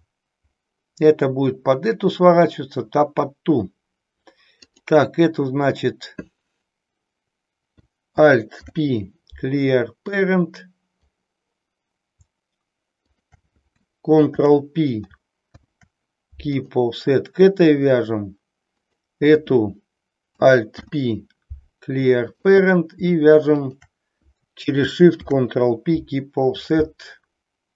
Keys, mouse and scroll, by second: 4.6 click, 8.5 alt+p, 13.0 shift+click, 14.1 ctrl+[, 15.4 ctrl+p, 18.9 click, 20.6 alt+p, 23.6 shift+click, 25.0 ctrl+p.